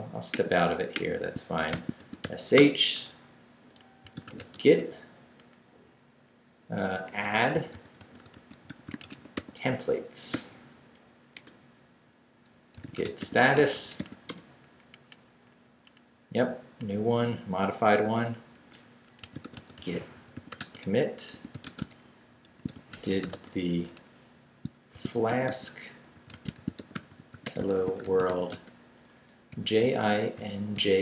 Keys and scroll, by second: 1.5-2.7 typing, 3.8-5.1 typing, 7.5-10.3 typing, 12.3 Return, 12.5-14.5 typing, 19.0-23.7 typing, 24.7-31.0 typing.